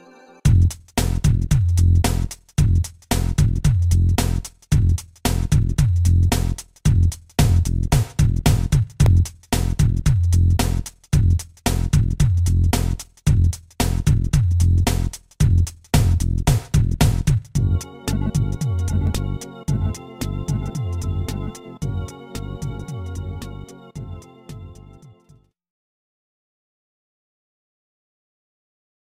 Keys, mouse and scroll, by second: 0.2 click, 0.6 a, 1.2 0, 2.1 ctrl+s, 2.3 click, 19.2 ctrl+s, 19.3 click, 20.4 click, 21.0 click, 24.3 right click, 25.4 scroll down 1, 27.1 click, 27.2 click, 27.5 click.